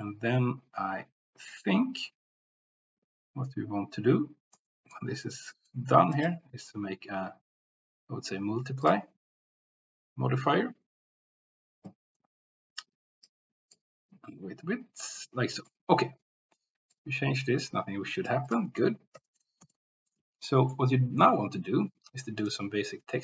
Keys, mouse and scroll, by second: 4.7 middle click, 5.7 middle click, 6.2-9.0 drag, 13.3 click, 15.2 middle click, 16.9-18.4 drag, 18.5-20.1 drag, 20.5 shift+middle click, 22.4-23.2 drag.